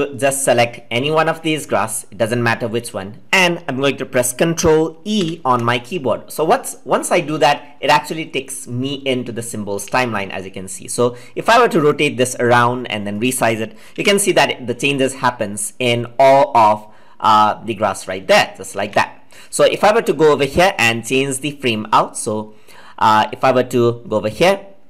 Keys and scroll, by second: 5.2 ctrl+e, 14.0 ctrl+z.